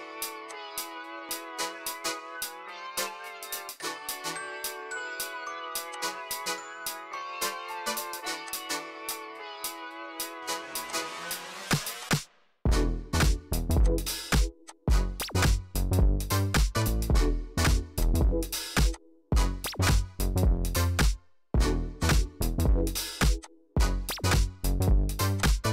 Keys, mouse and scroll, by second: 1.3 click, 4.6 click, 6.0 click, 8.6 click, 9.2 click, 9.9 right click, 11.0 click, 14.2 right click, 14.9 click, 15.9 click, 16.5 click, 16.9 click, 18.1 click, 19.1 click, 21.9 click, 23.1 click, 24.1 click, 25.5 click.